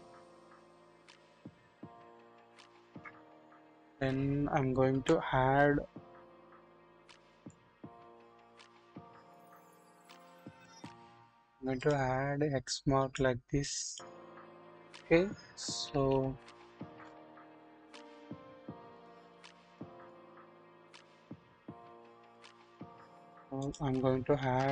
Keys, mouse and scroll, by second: 4.9 typing, 7.3 click, 8.8 KP_1, 9.1 scroll up 1, 10.4-10.9 drag, 11.8 click, 12.6 click, 13.6 click, 15.8-17.1 typing, 15.9 ctrl+z, 17.0 click, 17.8-18.8 scroll down 1, 18.9 click, 19.4 double click, 19.9 double click, 21.8 ctrl+z, 22.3 double click, 23.6 click, 24.4 shift+a.